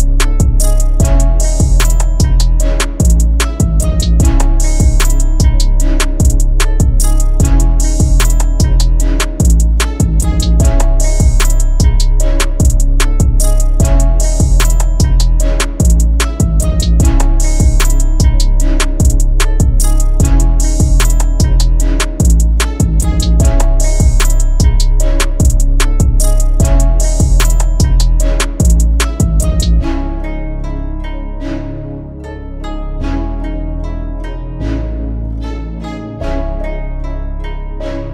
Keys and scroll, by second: 11.5 ctrl+i.